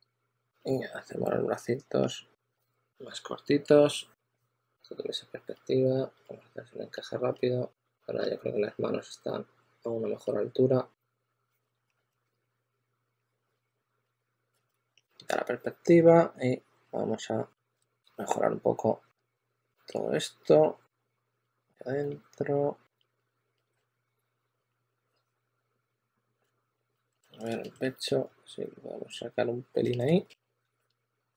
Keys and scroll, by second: 12.1 q, 14.3-15.7 typing, 17.7 super+z, 19.6 s, 21.9 s, 22.9 s, 23.2 2, 25.2 2, 26.3 super+z, 27.0 2, 27.9 2.